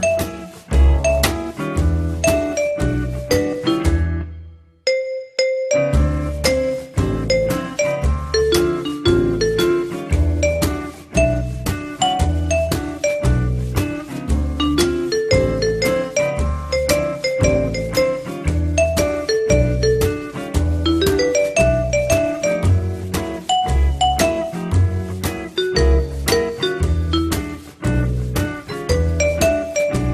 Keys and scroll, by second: 6.7 F3.